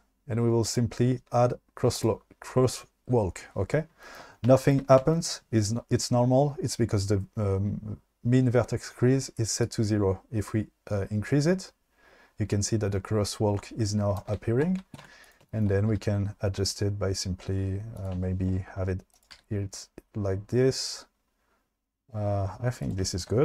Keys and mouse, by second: 1.9 drag, 9.7-14.3 drag, 15.1 1, 16.0 g, 18.0 click, 19.1 click, 19.4 g, 22.8 click.